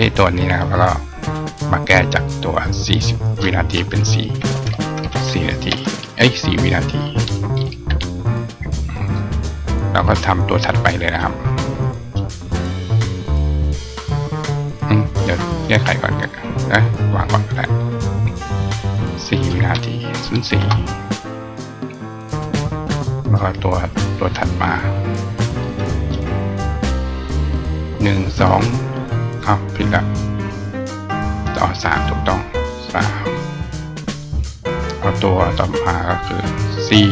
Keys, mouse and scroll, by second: 0.3 click, 2.5 click, 3.0 click, 10.8 click, 11.9 click, 14.2 click, 16.7 click, 17.0 click, 19.1 click, 25.4 click, 30.4 click, 34.0 click, 35.5 click.